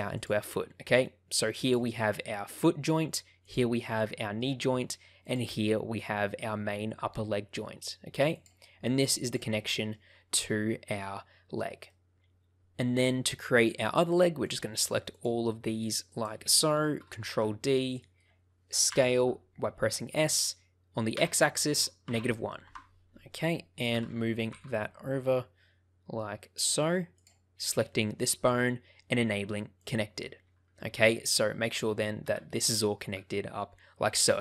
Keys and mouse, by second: 0.1 click, 0.5 middle click, 4.0 shift+middle click, 5.2 click, 8.4 click, 9.2 click, 9.5 shift+middle click, 11.8 shift+middle click, 14.4 shift+click, 15.1 shift+click, 17.3 shift+d, 18.0 click, 18.8 s, 21.1 x, 22.0 -, 22.1 1, 22.6 Return, 23.9 g, 24.4 x, 26.5 click, 27.8 shift+middle click, 29.7 click, 31.6 click, 32.2 g.